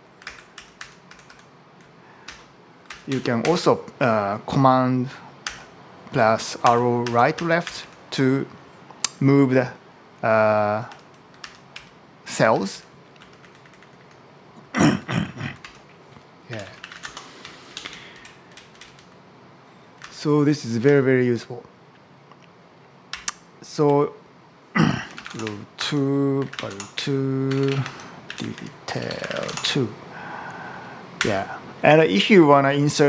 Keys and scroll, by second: 0.1 super+Right, 0.4 super+Left, 1.0 super+Right, 2.1 Down, 2.7 super+Left, 3.2 Up, 5.3 super+Right, 6.7 super+Right, 6.9 super+Left, 7.5 super+Right, 10.7 super+Left, 11.2 super+Left, 11.6 Down, 12.3 super+Right, 13.0 Down, 13.2 Left, 14.7 Right, 15.5 Up, 16.1-17.4 typing, 17.5 Down, 17.6 Left, 19.8 super+Left, 22.9 Up, 23.7 Down, 24.7-30.1 typing, 27.6 Tab, 31.0 Up.